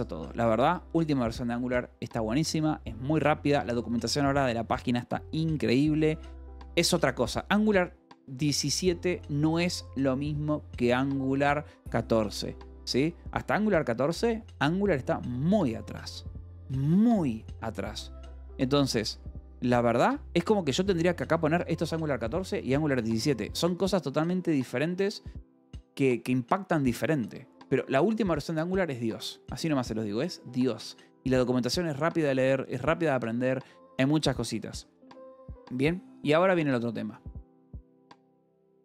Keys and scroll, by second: 13.8 Escape, 19.0 k, 20.4-22.4 typing, 20.7 Escape, 23.0 Escape, 23.5 j, 35.9 o, 36.3 =, 36.5 space.